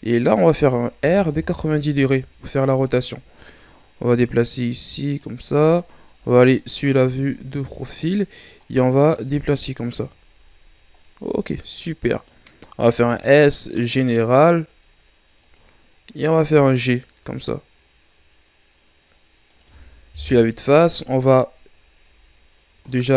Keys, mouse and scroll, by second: 1.0 r, 3.8-6.1 drag, 6.1 KP_3, 7.2-8.5 ctrl+scroll down 5, 8.6-10.0 drag, 10.0-11.0 shift+scroll down 6, 11.0-11.5 scroll up 1, 11.5-12.8 drag, 12.8 s, 16.0-16.4 scroll up 1, 16.4 g, 20.1 KP_1, 22.9-23.1 drag.